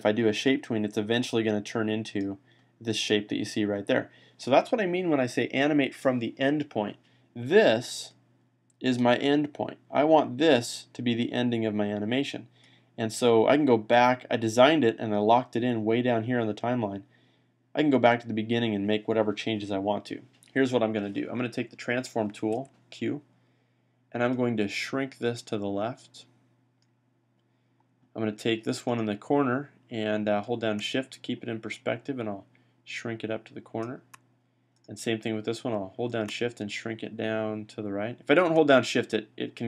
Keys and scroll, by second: 22.4 q.